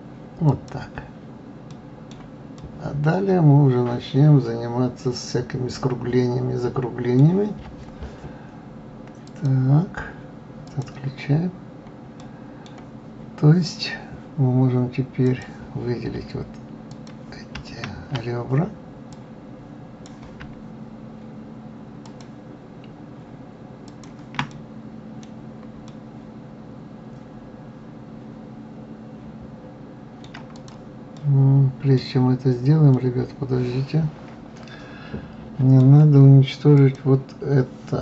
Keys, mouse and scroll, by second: 2.1-6.0 middle drag, 9.7 click, 11.1-11.8 drag, 11.8-12.6 scroll up 2, 12.6-15.6 middle drag, 15.7 click, 17.3-22.6 drag, 24.3 shift+click, 24.9-25.7 middle drag, 25.7-26.3 scroll down 4, 26.3-29.3 middle drag, 30.9 click, 31.6-32.7 middle drag, 32.7-33.3 scroll down 2, 33.3-36.3 middle drag, 37.2 click.